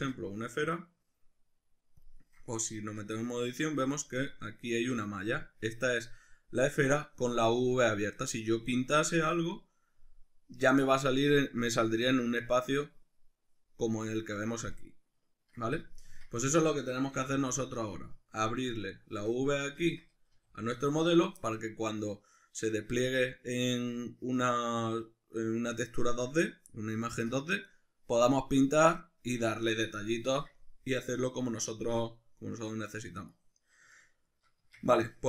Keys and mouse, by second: 2.8 Tab, 3.9-18.7 ctrl+middle drag, 4.8 a, 16.1 Tab, 17.2 x, 18.7 right click, 19.8 Tab, 20.4 a, 33.9-35.2 shift+middle drag, 34.6 Tab.